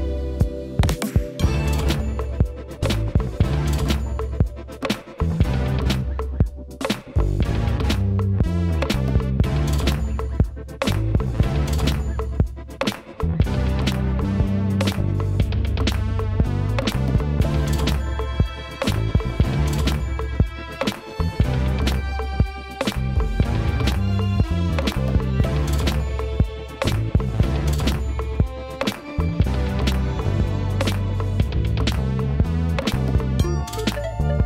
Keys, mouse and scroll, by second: 3.9 scroll down 4, 4.0-10.5 shift+middle drag, 10.5 click, 12.9-21.1 drag, 21.5 BackSpace, 21.6 click, 21.8 click, 22.1 click, 22.2 shift+middle click, 23.0 click, 23.2 scroll up 2, 23.3 shift+middle click, 23.5 KP_Divide, 23.6 scroll down 2, 23.7 click, 23.7 middle click, 23.8 click, 24.4 click, 25.9 click, 26.7-29.1 shift+middle drag, 29.1-34.4 drag.